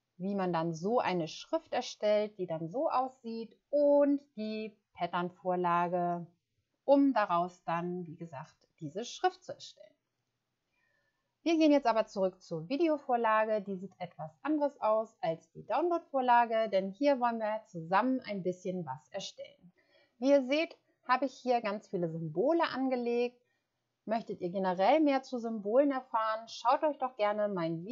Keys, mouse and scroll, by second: 4.5 click.